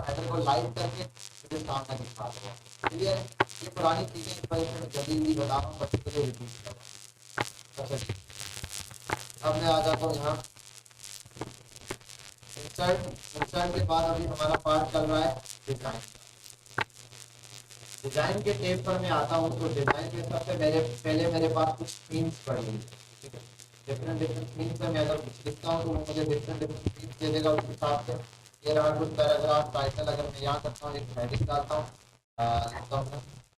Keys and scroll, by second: 5.8 ctrl+a, 11.4 Delete.